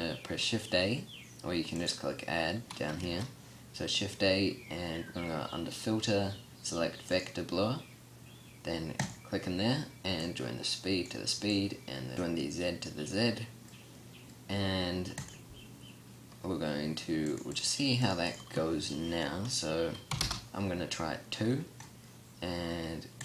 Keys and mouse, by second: 3.1 shift+a, 15.9-23.1 drag.